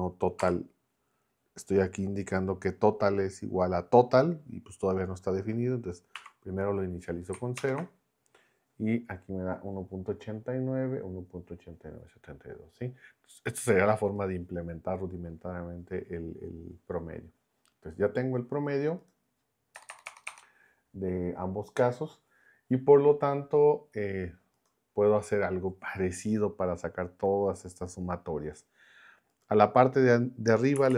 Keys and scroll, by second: 0.0-0.4 typing, 6.1 0, 7.5 ctrl+Return, 19.7 BackSpace, 30.5-30.9 typing.